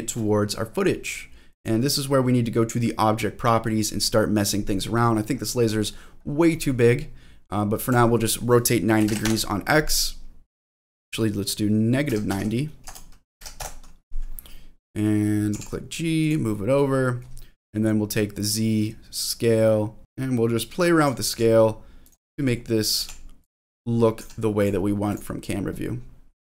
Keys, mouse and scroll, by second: 0.4 scroll up 1, 0.7-1.6 scroll down 1, 1.6 click, 1.6 scroll down 1, 5.4 scroll down 1, 5.6-6.4 scroll up 6, 6.6-7.0 scroll down 3, 7.0-7.9 scroll up 1, 7.9-9.9 drag, 7.9-8.4 scroll up 1, 10.6-14.2 drag, 14.6 middle click, 15.5 g, 16.2 click, 16.5 middle click, 18.1-21.0 drag, 20.0 scroll down 2, 20.0 g, 21.2 g, 22.0 click, 22.3 middle click, 23.0 g, 23.4 click, 23.7 middle click, 24.2 g, 24.6 click, 25.1 click.